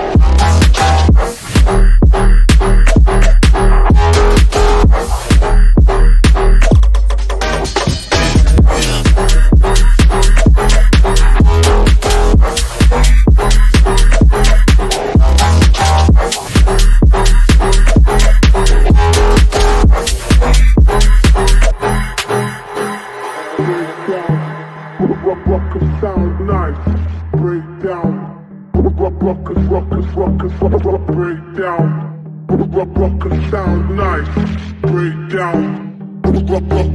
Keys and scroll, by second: 6.5 shift+F2, 7.2 Escape, 15.6 F3, 18.2 Left, 18.9 Escape, 24.1 F3, 28.3 F3, 30.0 ctrl+z, 31.0 ctrl+shift+z, 32.5 ctrl+z, 34.7 ctrl+z, 35.2 shift+F2, 35.7 F3, 36.0 F3.